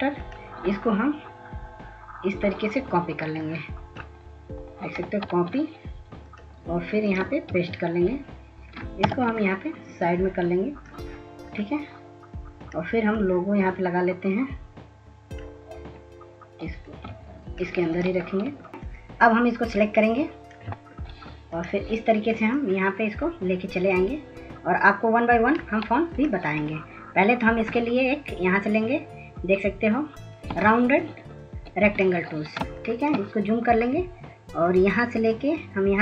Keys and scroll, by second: 5.2 ctrl+c, 9.1 ctrl+-, 33.0 ctrl+space, 33.3 ctrl+s.